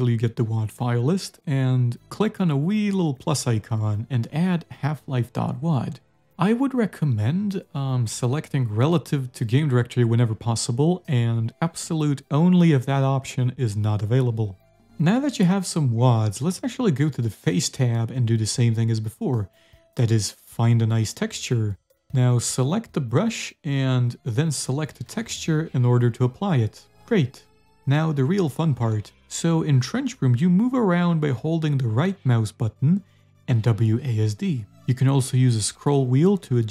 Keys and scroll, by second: 18.4 t, 18.7 e, 33.5-36.7 typing.